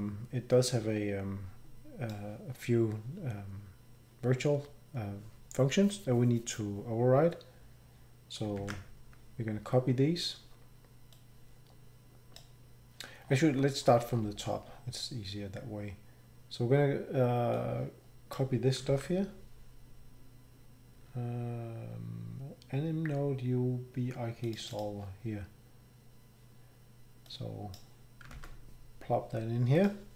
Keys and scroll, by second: 8.6 ctrl+c, 18.9 ctrl+c, 28.3 ctrl+v.